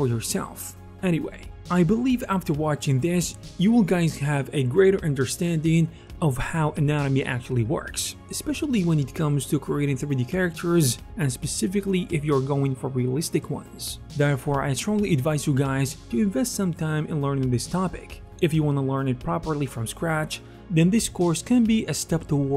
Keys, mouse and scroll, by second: 0.0 f, 0.2-1.4 drag, 0.4 f, 0.6 f, 1.4 middle click, 1.6 alt+f, 1.6 alt+click, 14.9 alt+click, 14.9 alt+middle click, 14.9 alt+right click, 15.1 ctrl+z, 15.9 alt+c, 16.1 alt+shift+right click, 16.1 f, 16.5 f, 16.8 ctrl+z, 16.8 right click, 16.9 f, 17.3-18.7 drag, 17.3 f, 18.1 ctrl+z, 22.0-22.5 drag.